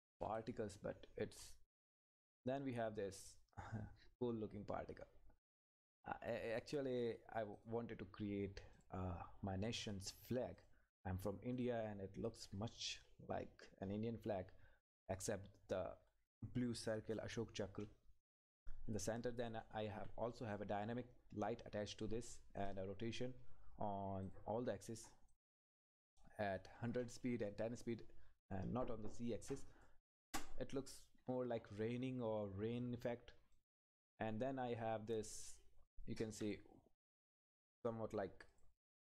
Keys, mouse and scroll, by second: 0.7 scroll down 1, 2.3 click, 2.6 Up, 6.5 scroll down 1, 7.5 click, 12.0-12.4 scroll up 1, 18.2 click, 18.4 Left, 20.3 click, 24.2 click, 28.5 click, 31.3-32.1 scroll up 1, 33.5 click, 33.8 Up, 38.5 click.